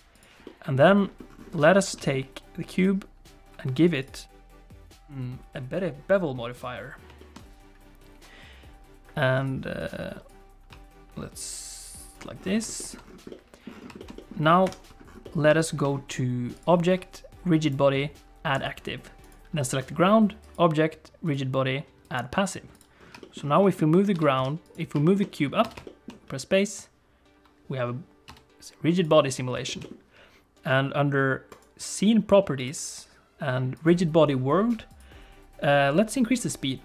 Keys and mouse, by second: 0.2 click, 0.4 middle click, 1.7 shift+middle click, 2.0 middle click, 2.8-6.6 drag, 7.2 shift+middle click, 9.5 click, 10.3-12.1 drag, 12.8 shift+middle click, 13.3 middle click, 14.0 shift+middle click, 14.2 middle click, 14.6 KP_1, 15.2 middle click, 15.6 shift+middle click, 16.6-18.7 drag, 19.2 click, 20.5-22.2 drag, 23.2 shift+middle click, 23.6 middle click, 24.1 g, 25.0 shift+click, 25.2 click, 25.6 space, 25.8 shift+click, 28.3 space, 29.0 click, 29.7 middle click, 29.8 middle click, 32.6 click, 33.7 click, 35.0 click.